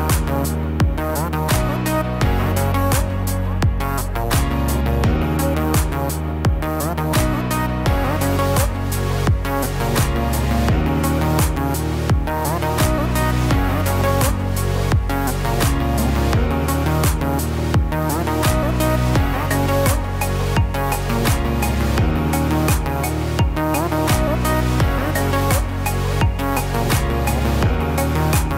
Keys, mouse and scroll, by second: 0.0 Tab, 1.4 r, 4.2 s, 6.7-7.2 scroll up 6, 7.2 middle click, 10.2 s, 14.9 g, 17.9 scroll down 3, 18.2 middle click, 19.0 scroll up 2, 20.4 shift+d, 23.3 Tab, 23.6 click, 24.1 click, 24.4-24.7 scroll down 3, 24.7 middle click, 27.2 scroll down 2, 27.7 scroll up 2, 28.1 middle click.